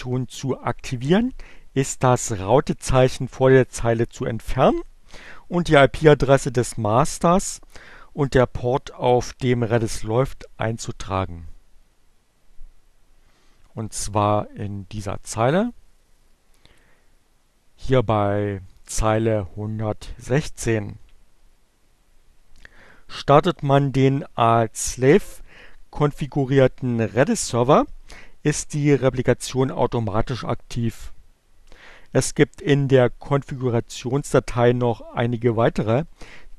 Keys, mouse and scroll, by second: 13.5-16.8 drag.